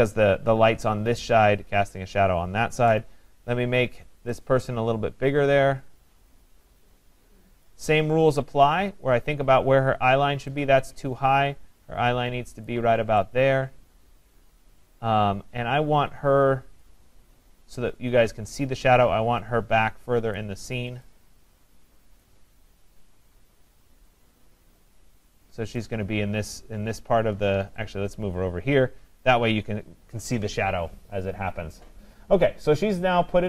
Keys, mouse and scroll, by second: 2.9 click, 7.6 click, 12.7 click, 16.8 click, 20.4 click, 22.2 click, 24.1 click, 25.8 click, 30.8 click.